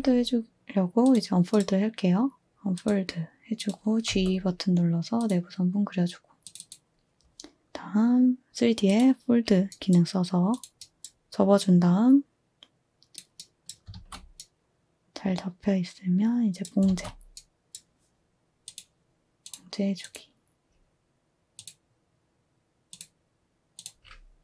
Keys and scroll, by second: 4.1 g, 13.9 a, 16.8 a.